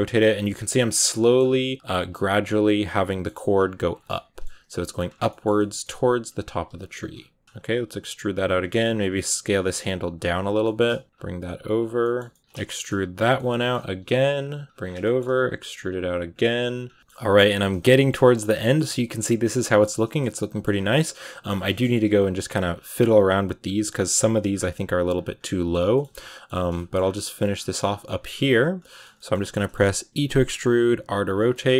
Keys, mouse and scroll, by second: 0.2 middle click, 0.4-1.0 scroll down 3, 1.0 middle click, 1.2-1.6 scroll up 3, 1.6 r, 1.8 g, 2.2 r, 2.5 middle click, 3.2 r, 3.5 g, 4.0 middle click, 4.7 e, 5.1 shift+middle click, 5.4 scroll up 1, 5.4 middle click, 5.8-9.8 typing, 9.5 middle click, 10.5 shift+middle click, 11.0 g, 11.3 g, 11.9 middle click, 12.4-16.3 typing, 12.5 shift+middle click, 13.2 middle click, 14.7 scroll down 5, 14.9 shift+middle click, 15.1 scroll up 1, 16.7-17.8 scroll down 10, 16.8 shift+middle click, 17.3 shift+middle click, 17.8 shift+middle click, 18.2 a, 18.5 shift+middle click, 18.7 a, 19.0-20.5 middle drag, 20.5-21.5 scroll up 3, 20.7 a, 21.5 scroll down 2, 21.6 shift+middle click, 22.0-22.3 scroll up 4, 22.6 scroll down 2, 22.7 shift+middle click, 23.0 scroll up 2, 23.7 right click, 23.8 middle click, 24.1 g, 24.8 right click, 24.9 g, 25.2-25.6 scroll down 8, 25.8 shift+middle click, 25.9 scroll up 1, 26.0 middle click, 26.4 a, 26.6 shift+middle click, 26.8-27.7 shift+scroll up 8, 27.1 middle click, 27.7 middle click, 28.5 right click, 28.7-30.0 middle drag, 30.0 e, 30.6 r, 31.4 shift+middle click, 31.5-31.7 scroll up 3.